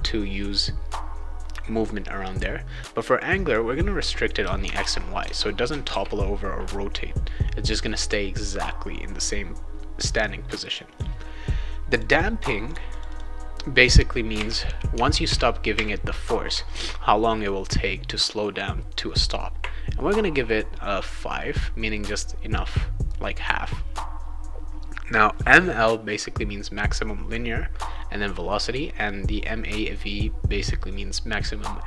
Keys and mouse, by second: 3.2 click, 4.6 Tab, 5.9 ctrl+s, 11.9 click, 12.1 click, 12.7 click, 12.9 click, 13.0 click, 14.9 Tab, 15.2 Tab, 16.7 ctrl+s.